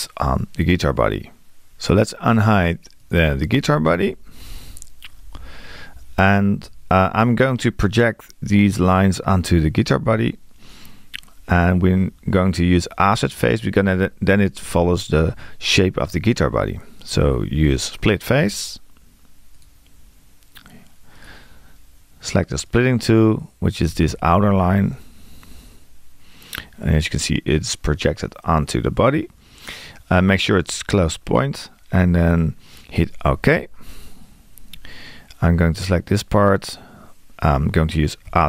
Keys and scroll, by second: 38.3 q.